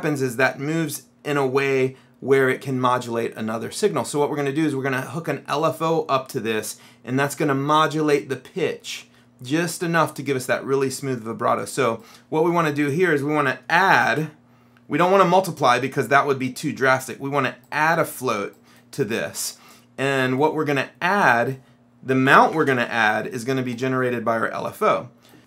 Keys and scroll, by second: 13.6-14.7 typing, 22.1-23.2 typing.